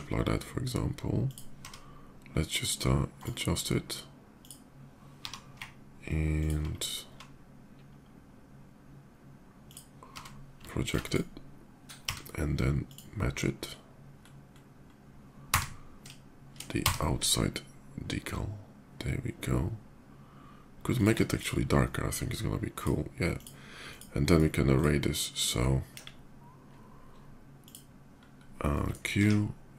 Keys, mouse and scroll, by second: 0.8 s, 1.0 click, 1.4 d, 2.9 click, 4.2 click, 5.7 ctrl+g, 6.1 middle click, 6.2 click, 7.0 s, 9.4 click, 10.6 click, 10.6 d, 10.8 click, 11.8 d, 12.6 click, 13.4 middle click, 13.9 middle click, 14.3 middle click, 15.4 d, 16.3 d, 16.4 d, 18.9 shift+middle click, 19.3 shift+middle click, 20.3 shift+middle click, 20.7 shift+click, 21.0 shift+click, 22.5 shift+click, 23.0 shift+click, 23.7 click, 23.9 click, 24.5 click, 24.8 click, 25.5 middle drag, 25.8 KP_5, 26.5 KP_5, 26.6-27.1 middle drag, 27.3 click, 29.2 q, 29.7 click.